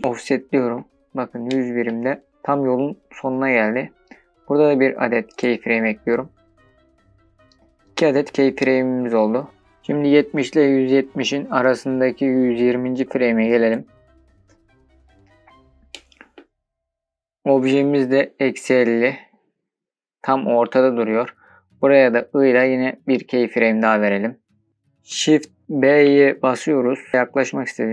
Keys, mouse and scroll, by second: 0.0 scroll down 4, 0.2 scroll up 3, 1.1-1.7 shift+middle drag, 1.1 scroll up 1, 6.8-9.3 drag, 9.3 scroll down 3, 10.6-13.5 drag, 13.5-13.9 scroll up 3, 13.9-15.1 scroll down 3, 15.3-16.0 shift+middle drag, 25.3 shift+b.